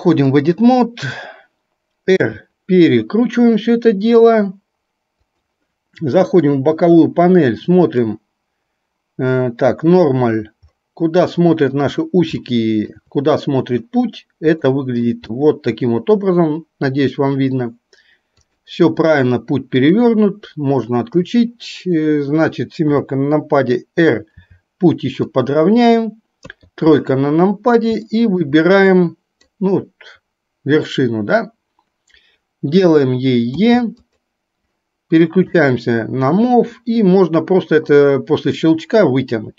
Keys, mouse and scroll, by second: 2.2 r, 6.6 click, 12.5 shift+middle click, 13.1 scroll down 1, 14.7 shift+middle click, 18.6-20.5 drag, 22.8 KP_7, 24.5 r, 26.6 KP_3, 28.2 shift+middle click, 29.2 click, 33.6 e, 38.1-39.5 drag.